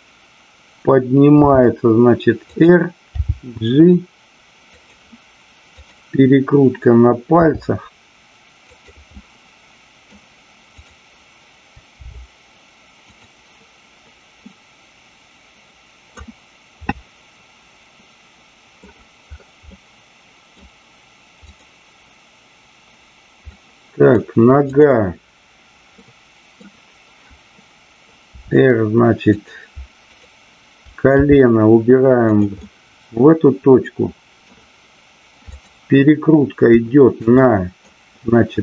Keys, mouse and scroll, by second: 1.4 r, 2.5 click, 3.1 g, 4.8 click, 5.8-7.0 drag, 7.2 r, 9.1 middle click, 10.8 click, 13.1 click, 14.5-16.1 middle drag, 16.9-18.9 middle drag, 19.7 scroll up 1, 19.9-20.5 middle drag, 23.5 middle click, 24.6 click, 25.9 middle click, 28.2 r, 32.4 click, 32.6-34.5 middle drag, 37.4-37.9 middle drag.